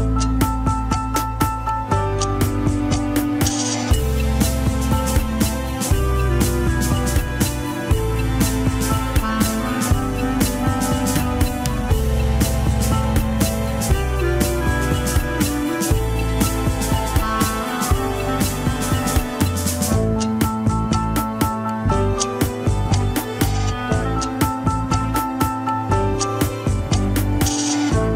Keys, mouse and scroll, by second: 0.3 ctrl+click, 1.1 ctrl+click, 1.4 scroll up 5, 3.1 ctrl+click, 3.6 scroll down 2, 5.1 ctrl+click, 5.6 g, 8.5 middle click, 9.4 g, 12.1 ctrl+click, 14.0 alt+z, 14.7 click, 15.6 middle click, 16.2 click, 16.9 middle click, 17.6 scroll down 2, 17.9 middle click, 18.3 alt+z, 19.3 ctrl+click, 19.4 alt+z, 20.0 g, 22.5 ctrl+s, 23.1-23.8 scroll down 3, 23.8 a, 24.3 alt+r, 24.6 alt+g, 24.7 ctrl+Tab, 25.4 click, 25.8 shift+z, 26.1 scroll up 3, 27.0 ctrl+Tab, 27.9 drag.